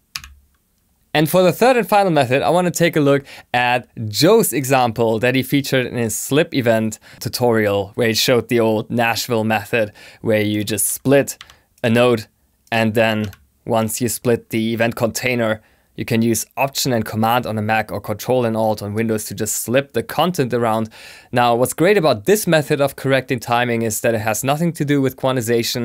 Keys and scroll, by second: 11.1-11.9 typing.